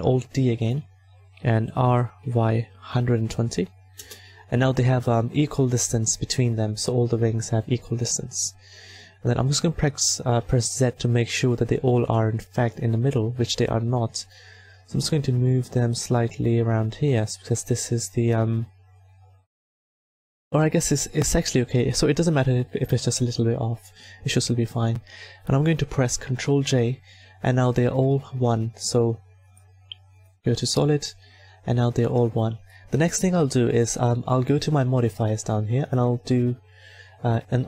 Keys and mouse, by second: 0.1 alt+d, 1.7 r, 5.1 a, 9.1 z, 12.6-17.2 right drag, 15.4 click, 20.2-22.1 drag, 26.1 ctrl+j, 27.8 a, 34.0-35.0 middle drag, 35.0-37.6 drag.